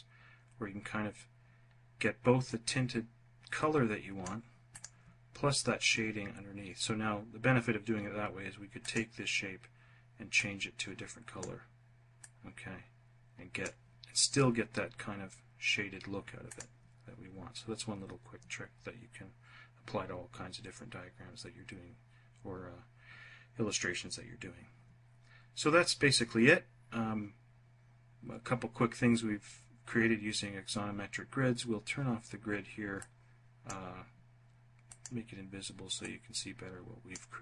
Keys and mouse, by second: 3.1 click, 3.6 click, 31.8 click, 33.7 click, 34.9-36.1 drag, 37.0 click.